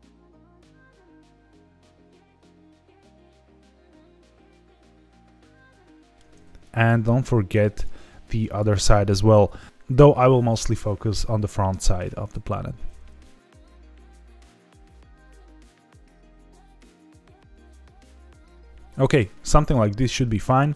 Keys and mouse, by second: 0.0 middle click, 0.3 shift+click, 1.0 middle click, 1.6 ctrl+z, 1.8 middle click, 2.5 middle click, 2.7 ctrl+z, 3.4 middle click, 4.2 shift+click, 4.6 ctrl+click, 4.8 middle click, 5.3 shift+click, 5.8 middle click, 6.6 shift+click, 7.5 shift+click, 8.3 shift+click, 13.2 middle click, 15.2 middle click, 15.8 shift+click, 17.3 middle click, 18.1 shift+click, 18.3 shift+click, 18.4-20.1 middle drag, 20.6 middle click.